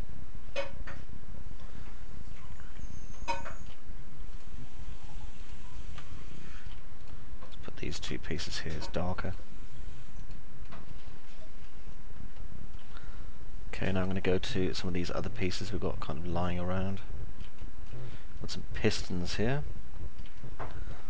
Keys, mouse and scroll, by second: 5.3 ctrl+click, 6.1 alt+middle click, 6.9 ctrl+click, 8.3 click, 11.1 alt+middle click, 11.9 alt+middle click, 15.1-17.3 alt+middle drag, 17.9 middle click, 18.4-20.1 alt+middle drag, 20.3 middle click.